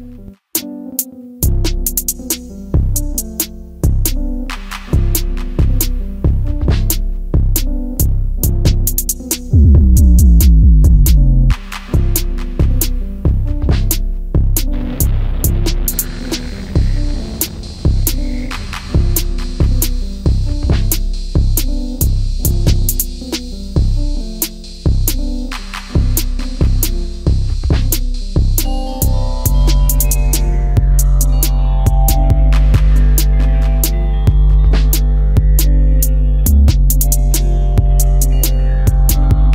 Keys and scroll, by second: 1.3 m, 8.2 shift+space, 16.6 alt+shift+t, 17.7 space, 21.4 m, 23.3 shift+space, 25.3 shift+x, 36.9 Up.